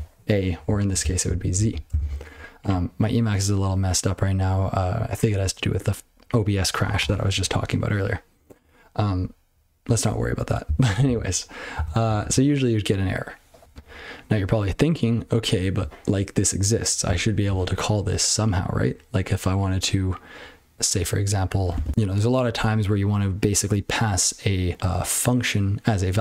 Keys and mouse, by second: 0.8 ctrl+p, 1.0 ctrl+n, 1.2 ctrl+n, 1.5 ctrl+p, 1.9 ctrl+space, 1.9 ctrl+n, 2.1 ctrl+w, 2.2 ctrl+p, 10.6 ctrl+n, 11.0 ctrl+n, 11.7 ctrl+d, 12.0 ctrl+p, 12.2 ctrl+p, 17.0-17.4 ctrl+f.